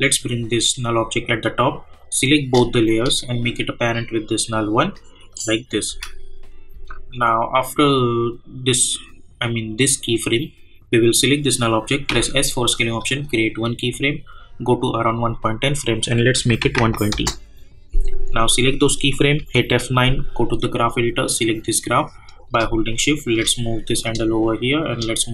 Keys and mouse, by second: 2.8 shift+click, 3.7-5.3 drag, 5.9 space, 7.8-11.0 drag, 12.1 s, 13.1 click, 17.1 Return, 18.3 click, 19.4 F9, 20.2-24.0 drag.